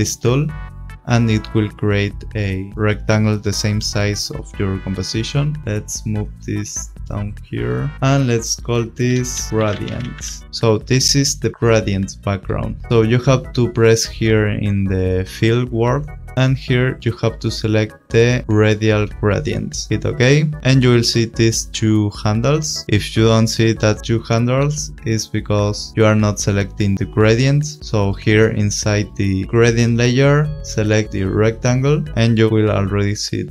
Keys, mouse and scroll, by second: 6.2 click, 9.2 Return, 9.3-10.5 typing, 10.4 click, 15.8 click, 18.4 click, 19.9 click, 22.8 click, 22.8 scroll, 23.6 scroll, 25.5 click, 27.6 click, 28.1 click, 31.0 click, 33.3 click.